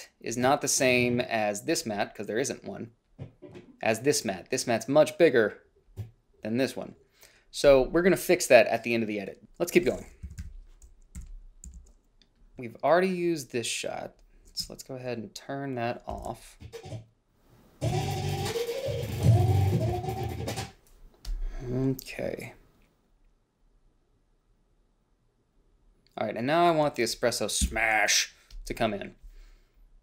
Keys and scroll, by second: 9.9-11.3 typing, 11.5 ctrl+b, 16.4 ctrl+b, 27.9 f.